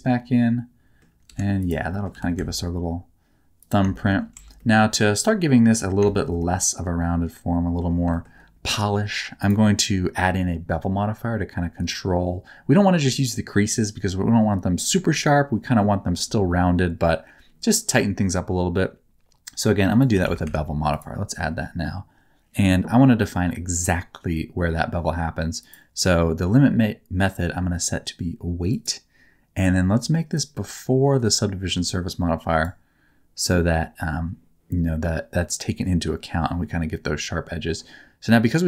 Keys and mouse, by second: 1.2 3, 1.9 middle click, 2.1 g, 2.3 z, 3.5 click, 3.9 shift+middle click, 4.3 Tab, 4.5 middle click, 5.2 middle click, 6.0 shift+middle click, 6.3-7.7 middle drag, 8.1 shift+middle click, 19.8-20.9 drag, 25.5-28.8 drag, 30.3-32.6 drag.